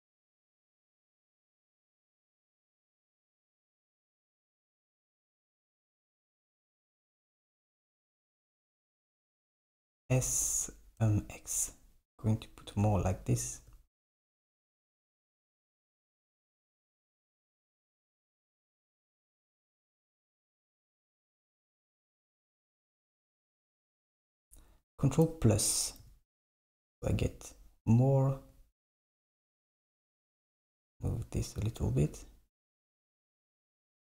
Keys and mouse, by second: 0.9 Tab, 1.4 Tab, 3.5 Tab, 5.4 Tab, 6.6 Tab, 7.5 click, 7.7 alt+click, 8.9 alt+shift+click, 10.2 s, 12.9 Tab, 15.9 Tab, 18.4-19.4 drag, 19.7 shift+click, 20.0 shift+click, 20.3 shift+click, 21.3 shift+click, 21.7 shift+click, 26.1 ctrl+KP_Add, 29.6 g, 32.3 Tab.